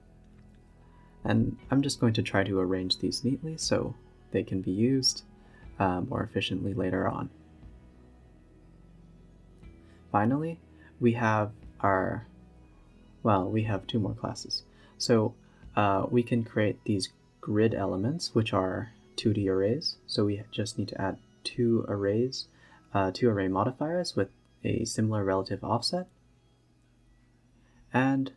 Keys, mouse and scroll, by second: 0.4 g, 2.1 click, 2.9 g, 3.5 a, 3.6 a, 4.7 b, 4.7 g, 5.3 a, 5.4 a, 7.8 click, 8.0 shift+d, 8.9 scroll up 4, 9.0-9.3 scroll down 1, 9.7-14.7 drag, 14.7 KP_Decimal, 15.2 s, 17.2-22.0 drag, 22.0-23.7 scroll down 8, 23.7 click, 24.2 scroll down 1, 24.3 a, 24.9 s, 25.8 g, 26.6-26.9 scroll up 8, 27.3-28.3 typing.